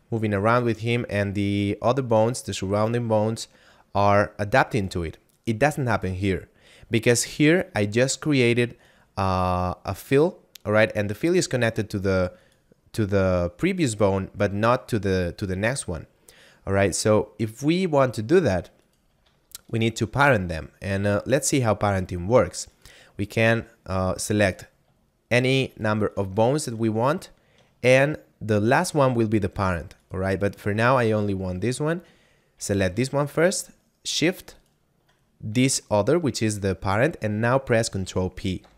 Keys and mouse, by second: 5.2 right click, 8.1 right click, 14.6 right click, 18.7 right click, 19.6 shift+right click, 22.7 right click, 23.2 shift+right click, 24.4 right click, 25.8 shift+right click, 26.1 shift+right click, 28.7 shift+right click, 30.0 right click, 32.8 right click, 34.4 shift+right click, 38.6 ctrl+p.